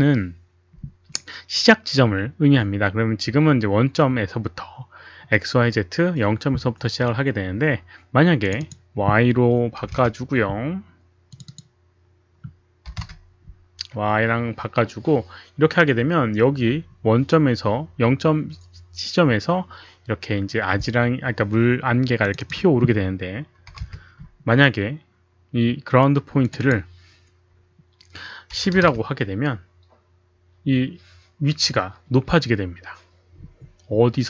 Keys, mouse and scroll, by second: 8.6 click, 9.8 KP_1, 9.9 Return, 11.1 Return, 11.1 KP_1, 11.5 click, 11.6 Return, 11.6 KP_1, 12.9 KP_0, 13.0 Return, 19.6 Return, 19.6 click, 19.6 KP_0, 20.7 Return, 20.7 click, 20.7 KP_0, 22.2 Return, 22.2 click, 22.2 KP_0, 22.3 Return, 22.3 KP_0, 23.7 KP_5, 23.8 Return, 25.2 Return, 25.2 KP_5, 28.5 KP_1, 28.7 KP_0, 28.8 Return.